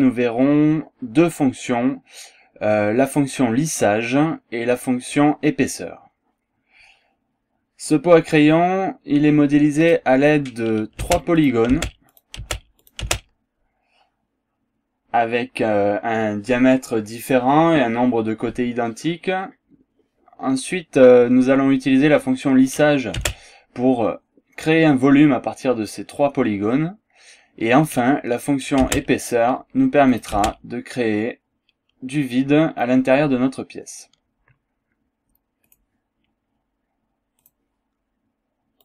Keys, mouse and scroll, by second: 9.9 click, 11.1 space, 11.4 click, 12.1 click, 12.1 space, 12.9 click, 13.2 space, 22.7 click, 23.3 space, 27.9 click, 28.9 space, 30.1 click, 30.5 space, 35.7 click, 37.5 click.